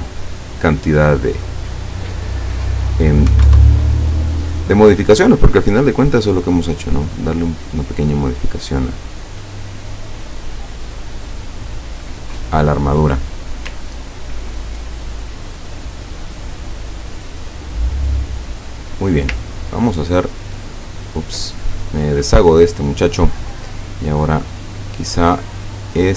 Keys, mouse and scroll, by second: 0.3 click, 1.9 click, 3.0 click, 3.3 KP_1, 3.5 KP_Enter, 5.1 click, 6.6 click, 7.3 click, 8.4 click, 9.7 click, 11.6 click, 14.0-14.4 ctrl+scroll down 4, 18.1 click, 18.8 click, 19.6 ctrl+click, 20.2 ctrl+click, 21.1 ctrl+scroll down 2, 22.1 click, 22.7 click, 23.8 click, 24.4-26.1 drag.